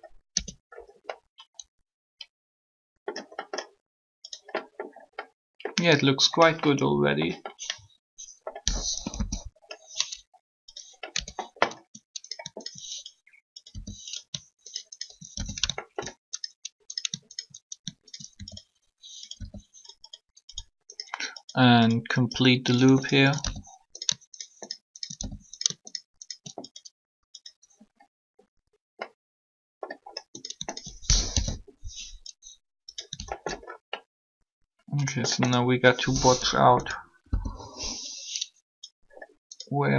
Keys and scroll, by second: 0.3 Tab, 8.8 3, 11.1 Tab, 13.5 r, 19.3 shift+r, 31.3 shift+1, 37.3 1.